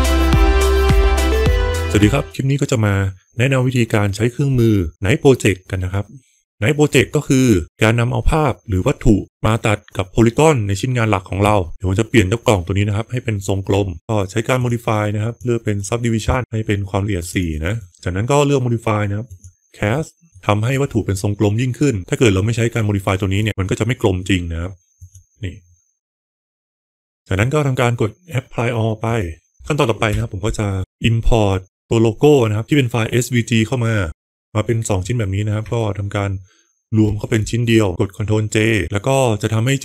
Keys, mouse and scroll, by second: 0.0 Tab, 2.1 click, 2.8 click, 6.6 click, 10.4 click, 13.9 alt+1, 14.4 click, 17.1 click, 17.3 click, 17.6 click, 17.8-19.3 drag, 20.2 middle click, 23.3 click, 24.8 click, 25.9-26.8 middle drag, 26.8 Delete, 29.0 click, 30.0 F4, 34.0 ctrl+j, 37.1 ctrl+j.